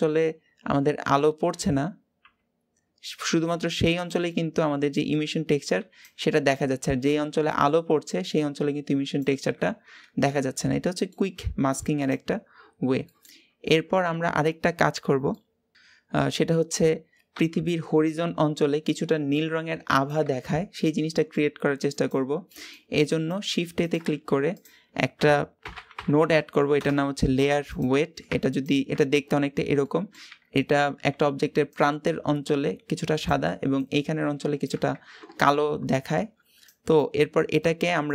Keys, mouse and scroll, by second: 4.1-4.9 middle drag, 4.9-9.5 scroll up 2, 9.5-10.1 scroll down 4, 10.1-12.0 middle drag, 12.0 click, 13.9-15.1 scroll up 2, 15.1 middle click, 15.7-20.2 scroll up 2, 22.9 click, 28.4 ctrl+shift+click, 29.4 scroll down 1, 29.6-37.9 middle drag, 37.9-38.1 drag.